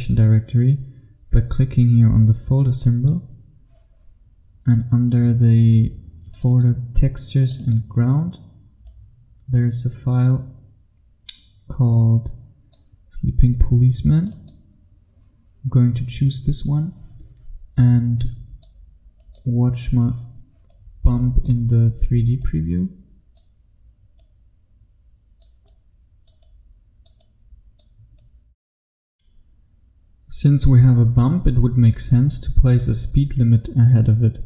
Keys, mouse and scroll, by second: 2.9 click, 29.8 f.